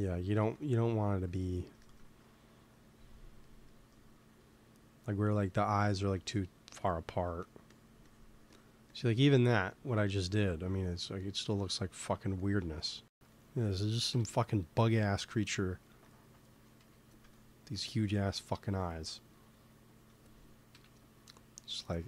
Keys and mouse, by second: 0.4 click, 1.3-2.4 drag, 1.7-2.8 middle drag, 2.8 x, 3.9 f, 5.6 f, 6.1-11.0 drag, 14.0 KP_1, 16.7 f, 17.3-20.6 drag, 19.3 middle click, 19.3 right click, 20.6 KP_1.